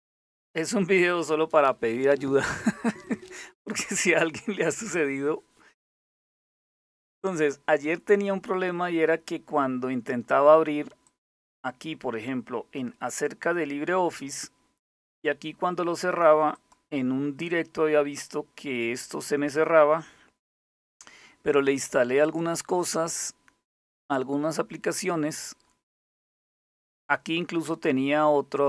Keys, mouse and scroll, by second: 10.7 click, 12.7 click, 16.1 click, 21.8 click, 23.3 click.